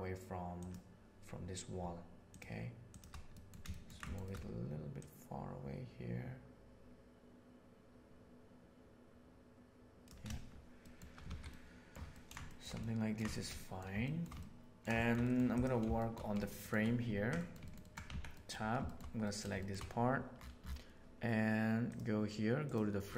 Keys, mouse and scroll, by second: 2.8 shift+click, 3.3 middle click, 3.6 ctrl+middle click, 4.0 shift+middle click, 4.1 shift+middle click, 4.9-10.0 right drag, 10.7 shift+middle click, 11.2 alt+a, 11.5 middle click, 12.0 ctrl+middle click, 12.4 shift+middle drag, 12.7-13.2 ctrl+middle drag, 13.2 shift+middle click, 13.5 middle click, 13.9 shift+middle drag, 14.3-14.7 ctrl+middle drag, 14.9 shift+middle click, 15.9 shift+middle drag, 16.3 ctrl+middle click, 16.5 ctrl+middle click, 17.3 middle click, 17.7 ctrl+middle click, 18.0 Tab, 18.2 middle click, 18.8 middle click, 19.1 middle click, 19.5 middle click, 22.6 click.